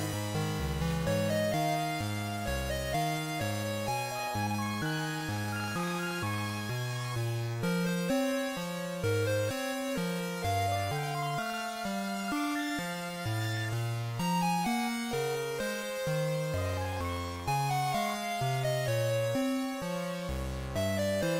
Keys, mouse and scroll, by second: 15.8 right click, 18.5 click.